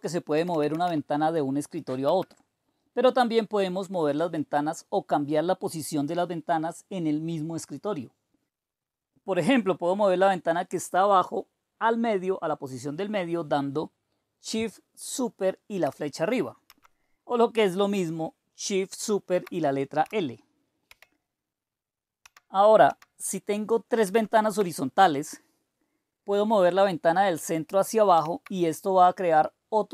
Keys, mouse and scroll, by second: 0.1-1.3 typing, 2.0 Return, 16.9 shift+super+Up, 20.8 super+l, 22.2 shift+super+Down, 23.0 shift+super+Down, 24.2 shift+super+Up, 28.3 super+e.